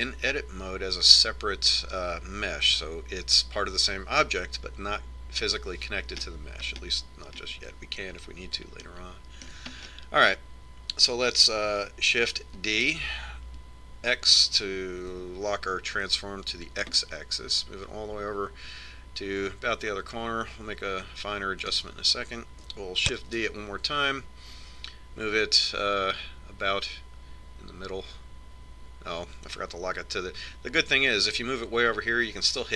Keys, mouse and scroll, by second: 7.4-13.0 middle drag, 13.9 shift+d, 24.5 shift+d.